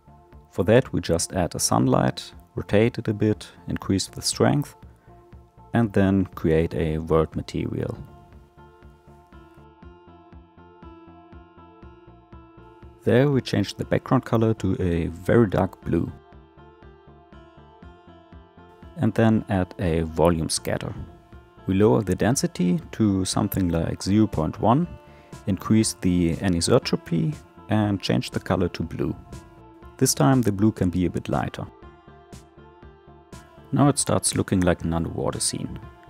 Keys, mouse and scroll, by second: 2.0 shift+a, 2.6 r, 3.2 r, 4.1 g, 5.2 g, 8.1-9.2 drag, 9.7 click, 12.8 click, 17.4 click, 20.9-27.3 drag, 33.0 click, 33.4-36.0 middle drag.